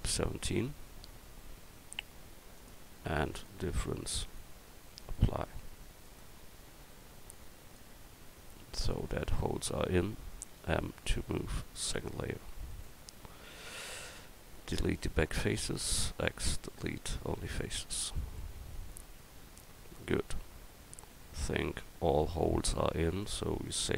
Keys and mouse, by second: 7.5 click, 10.6 m, 12.7 right click, 13.3 Tab, 13.9 right click, 15.9 x, 17.6 Tab, 18.8 a.